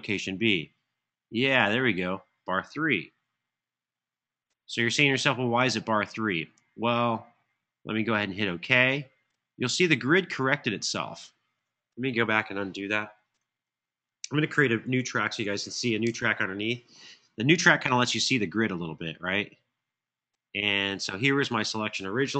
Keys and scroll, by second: 3.7 3, 13.3 super+z, 14.9 shift+super+n, 15.8 Return.